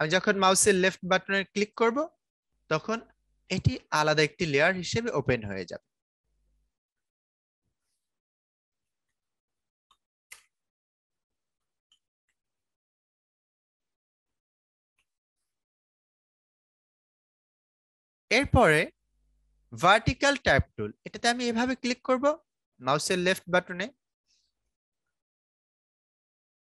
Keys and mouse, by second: 1.5 click, 6.2-8.7 drag, 8.5-15.4 typing, 17.1 click, 18.7 right click, 19.9 click, 24.6-26.7 typing.